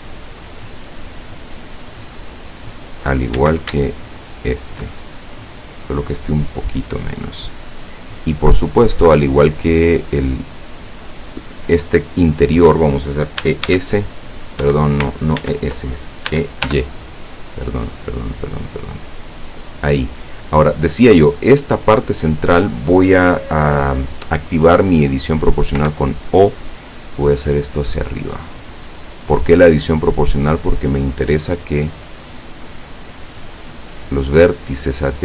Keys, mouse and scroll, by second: 3.4 a, 4.3 alt+shift+right click, 5.7-7.5 drag, 8.5 click, 9.6 click, 13.5 e, 13.8 s, 14.8 Escape, 15.5 ctrl+z, 16.4 e, 16.8 y, 19.7 click, 20.9 right click, 21.6 scroll up 1, 22.5 scroll down 1, 25.8 o, 27.4 click, 28.5-28.9 scroll down 1, 29.4 scroll down 1.